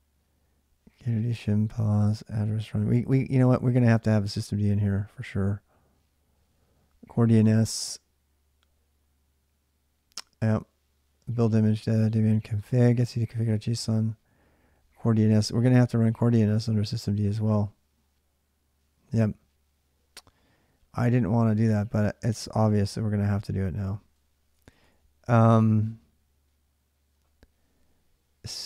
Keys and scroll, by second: 2.2 Return, 22.7 Return, 23.9-24.7 typing.